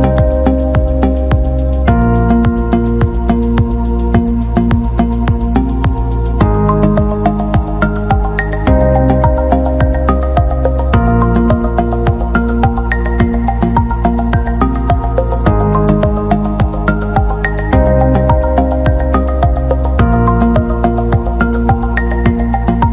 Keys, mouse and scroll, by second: 5.1 click, 12.8 click, 20.2 click.